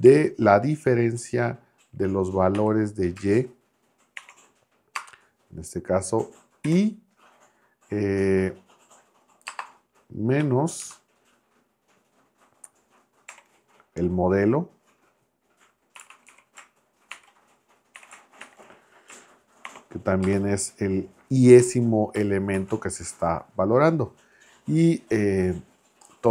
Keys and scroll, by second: 0.0 shift+9, 2.5 y, 4.2 shift+6, 4.9 space, 6.6 l, 9.4 space, 10.4 -, 10.8 space, 13.3 \, 15.9-18.4 typing, 19.7 shift+6, 20.2 space, 21.6 i, 22.5 shift+0.